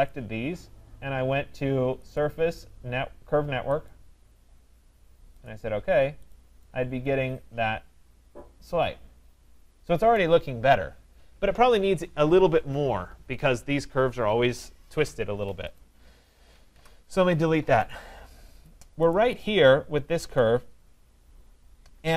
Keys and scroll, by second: 15.3 Escape, 16.7 Delete.